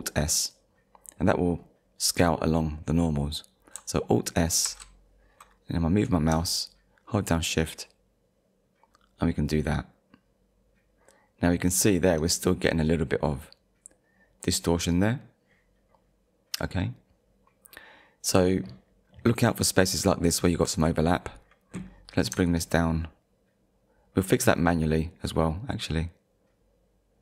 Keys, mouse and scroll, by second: 4.7 alt+s, 11.9 shift+click, 19.1 scroll up 1, 22.5 shift+click.